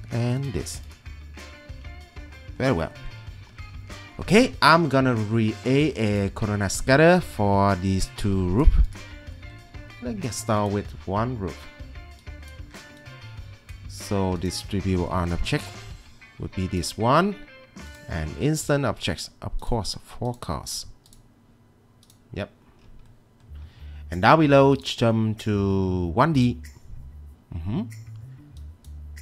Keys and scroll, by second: 1.7 Escape.